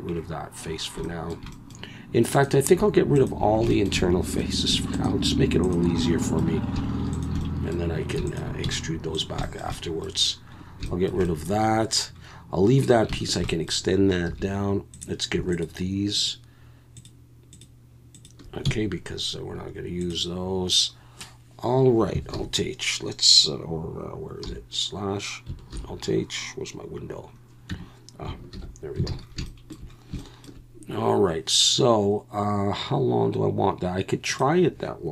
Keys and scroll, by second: 8.6 x, 14.3 2, 18.6 x, 22.3 alt+h, 24.4 /, 25.7 alt+h, 27.7 Tab, 28.5 alt+h, 29.1 alt+a.